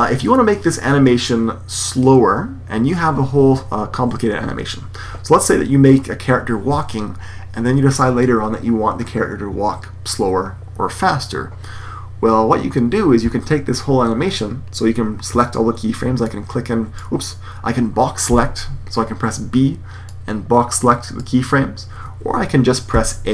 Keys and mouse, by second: 16.2-17.2 drag, 21.4 click, 23.1 click.